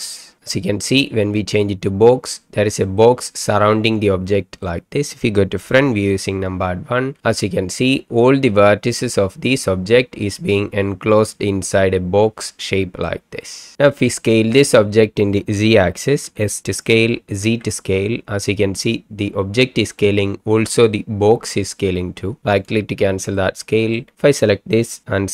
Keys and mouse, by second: 3.1-4.6 middle drag, 6.1 KP_1, 13.2-13.7 middle drag, 16.2 s, 17.4 z, 23.4-24.1 middle drag.